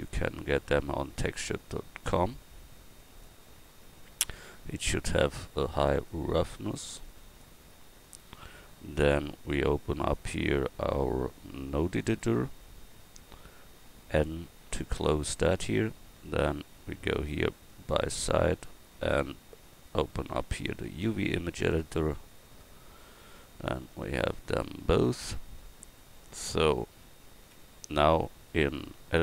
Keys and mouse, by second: 27.5 Tab.